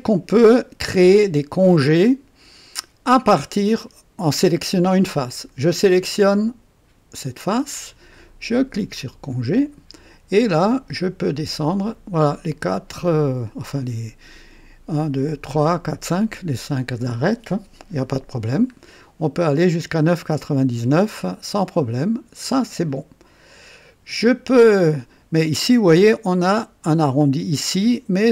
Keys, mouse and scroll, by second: 0.3-2.3 drag, 3.7-4.5 drag, 5.3 click, 8.9 click, 10.7-11.0 scroll up 2, 11.3-11.7 scroll up 2, 12.4 scroll up 2, 13.0 scroll up 2, 18.0-18.4 scroll up 2, 20.7 scroll down 2, 25.4-27.1 drag, 27.7 click.